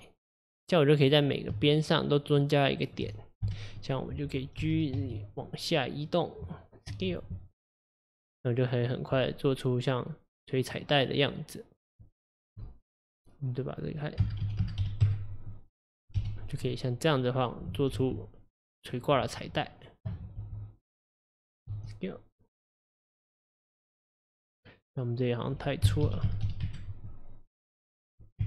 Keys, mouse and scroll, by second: 1.0 click, 1.7 shift+click, 2.3 shift+click, 2.8 shift+click, 3.5 KP_1, 4.6 g, 6.9 s, 9.2-12.2 middle drag, 13.8-16.2 drag, 16.2 KP_1, 18.0 g, 19.5 click, 20.4 g, 25.4-28.4 drag.